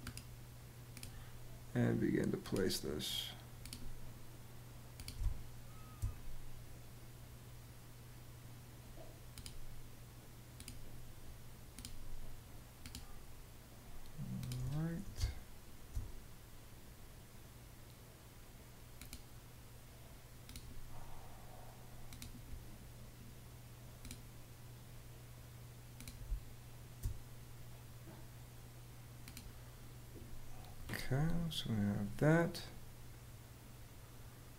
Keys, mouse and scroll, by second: 4.9 space, 14.9 space, 25.9 space.